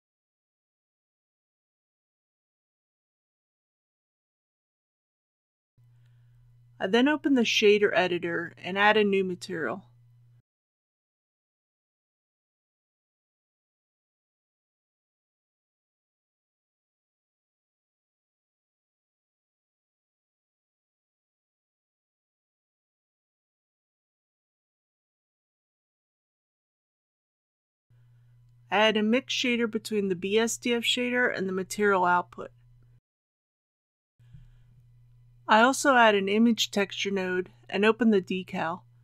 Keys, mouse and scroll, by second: 1.5 Tab, 3.3 u, 4.2 click, 14.4 n, 18.0 click, 19.3-20.4 scroll up 1, 20.5 shift+middle click, 22.0 scroll down 1, 22.2-22.7 scroll up 1, 23.3-23.7 scroll down 1, 23.7-24.0 scroll up 1, 24.0-28.3 drag, 28.3-29.3 scroll down 1, 29.6 shift+a, 32.2 click, 36.2 shift+a.